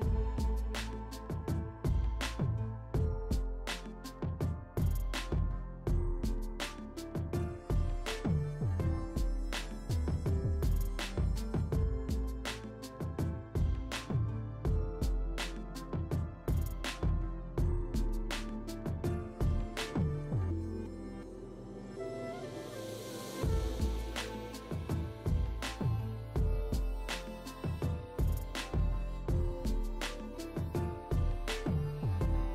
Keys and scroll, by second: 0.1 space, 0.2 [, 14.3 [, 15.1 ], 16.2 6, 17.5 3, 19.8 space, 20.3 ], 24.0 [, 24.8 ], 26.2 [, 31.1 [, 31.7 [, 32.1 2.